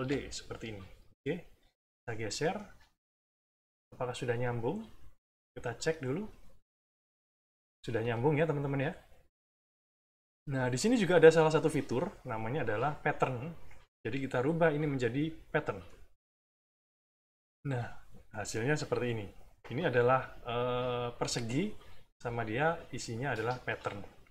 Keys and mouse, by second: 1.8 click, 2.7 middle click, 3.3-4.6 drag, 5.4 click, 6.0 middle click, 6.5 click, 8.0 click, 9.5 middle click, 10.1 click, 11.9-16.0 drag.